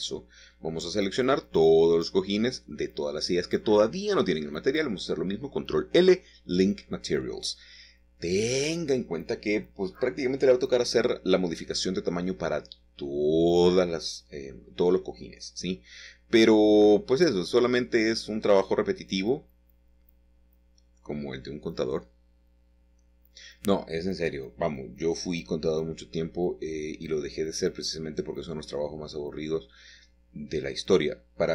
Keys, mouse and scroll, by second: 1.7-2.2 scroll down 1, 2.5 middle click, 3.6 click, 4.3 shift+click, 5.1 shift+click, 6.3 shift+click, 6.8 middle click, 6.9 click, 6.9 middle click, 7.1 click, 7.2 middle click, 7.3 shift+middle click, 7.9 shift+click, 8.4-9.6 shift+drag, 10.2 ctrl+l, 10.7 Return, 14.0-15.3 shift+middle drag, 15.1 click, 17.7 Tab, 20.8 a, 22.5 typing, 23.1 Escape, 24.9 u, 26.9 u, 27.7 click, 28.8 click, 30.3 s.